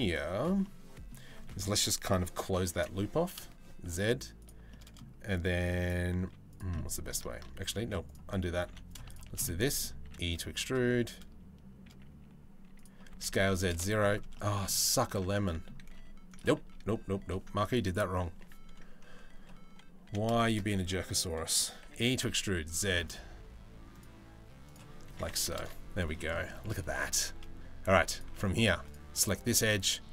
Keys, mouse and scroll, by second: 0.2 middle click, 1.1 shift+middle click, 2.3 e, 4.3 middle click, 5.8 z, 6.3 middle click, 6.9 ctrl+z, 8.2 3, 8.5 click, 8.7 shift+middle click, 9.0 middle click, 9.6 e, 13.9 middle click, 15.0 middle click, 15.4 g, 16.2 ctrl+z, 16.6 ctrl+z, 19.9 shift+2, 20.3 middle click, 21.4 e, 23.6 click, 24.7 s, 25.7 middle click, 26.1 shift+middle click, 27.5 z, 28.3 2, 29.2 middle click.